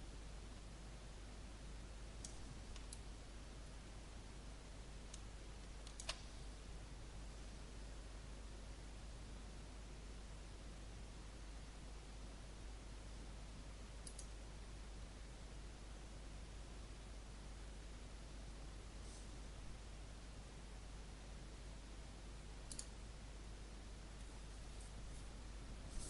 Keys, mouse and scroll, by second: 2.9-5.9 alt+drag, 14.0 click.